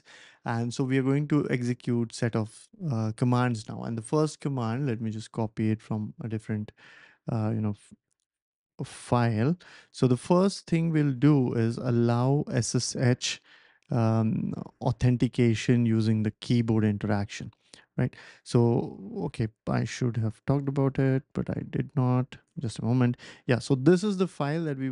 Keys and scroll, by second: 5.8 super+c, 8.3 ctrl+shift+v, 9.5 Left, 10.0 Left, 10.1 Left, 10.2 Left, 10.3 Left, 10.4 Left, 12.0 Right, 12.3 BackSpace, 12.4 BackSpace, 12.6 BackSpace, 16.2 Return, 19.5-22.2 typing, 22.4 Return, 23.2 Up.